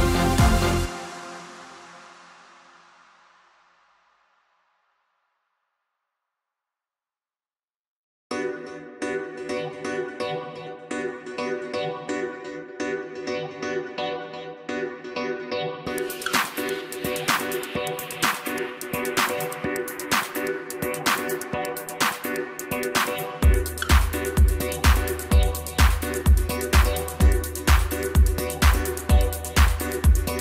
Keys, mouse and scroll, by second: 2.3-5.3 drag, 8.8-10.5 drag, 18.0-19.2 scroll up 1, 20.2 KP_Divide, 21.0 KP_7, 21.6 Tab, 22.6 3, 24.2 click, 25.1 shift+click, 26.0 shift+click, 27.9 shift+click, 29.3 shift+click.